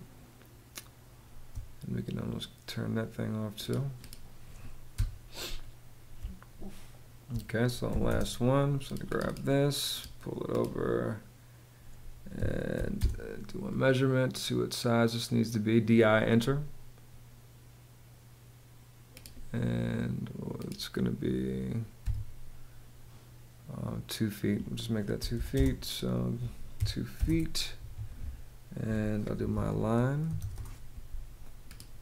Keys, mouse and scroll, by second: 4.5 BackSpace, 5.8 space, 7.5 m, 7.7 space, 12.0 d, 12.3 i, 12.6 space, 13.6 space, 21.6 Escape, 24.6-26.4 typing, 26.9 Return, 27.4 Escape, 28.8-30.5 typing.